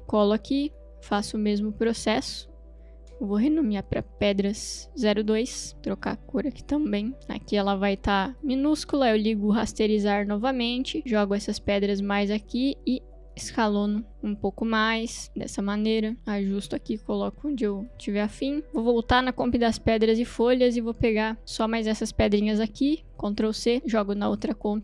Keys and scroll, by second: 0.0 ctrl+v, 3.0 Return, 4.2-5.6 typing, 12.7 s, 23.4 ctrl+c, 24.7 ctrl+v.